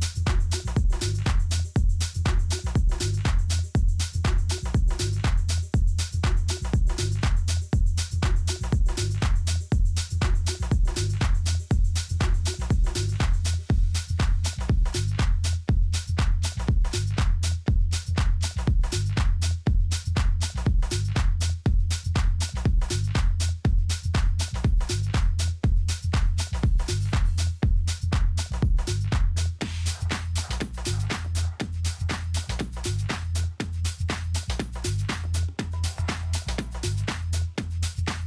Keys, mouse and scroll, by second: 0.4 Tab, 1.4-2.6 middle drag, 2.6-4.5 drag, 5.1-6.9 middle drag, 7.0-8.7 drag, 9.0 KP_3, 9.9-12.9 middle drag, 13.0-14.7 drag, 17.4-18.7 middle drag, 18.1 r, 22.9-24.8 drag, 31.5-34.1 middle drag.